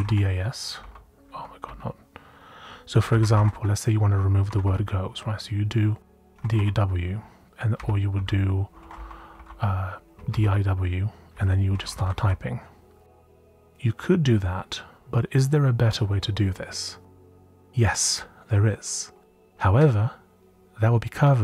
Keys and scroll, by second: 0.0-0.7 typing, 1.3 Down, 1.6 Up, 2.7-3.8 typing, 4.4 End, 4.6 End, 6.0-12.6 typing, 8.7 Escape.